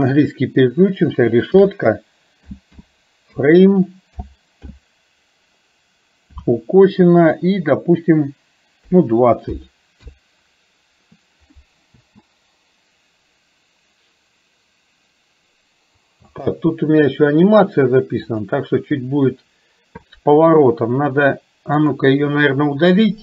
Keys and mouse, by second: 12.0 space, 16.4 space, 18.5 click, 22.0-23.2 drag.